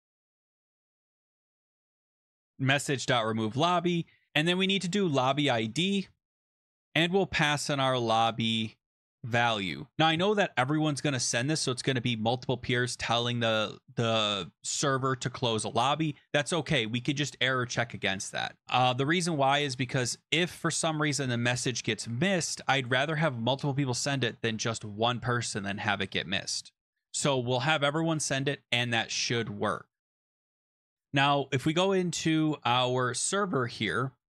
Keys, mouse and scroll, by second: 0.0-8.3 typing, 9.0 Down, 9.1 Return, 9.9 ctrl+s, 16.7 click, 17.4 Right, 17.8-19.1 typing, 19.1 click, 29.9 click, 30.2 ctrl+s, 31.5 click, 33.0 click.